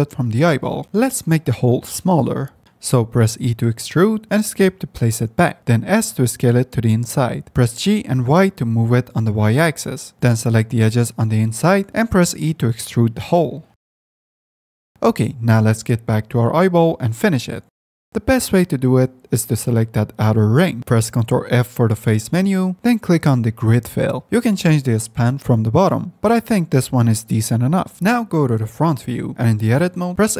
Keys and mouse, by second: 0.2 Tab, 0.8 click, 0.8 2, 2.2 s, 3.4 e, 5.7 s, 7.4 g, 8.9 s, 10.1 g, 10.5 g, 12.4 s, 13.3 g, 13.4 e, 14.9 Tab, 16.2 ctrl+z, 16.2 g, 16.5 Tab, 17.6 h, 18.7 Tab, 19.0 2, 21.6 ctrl+f, 29.4 middle click, 30.1 Tab.